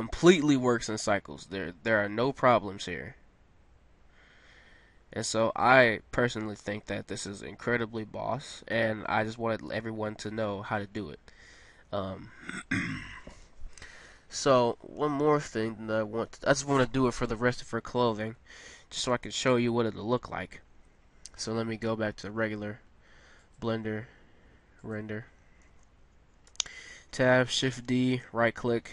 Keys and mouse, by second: 4.4 middle click, 11.7-14.9 middle drag, 15.9-19.6 middle drag, 19.6-21.0 right drag, 26.5 Tab, 27.6 shift+d.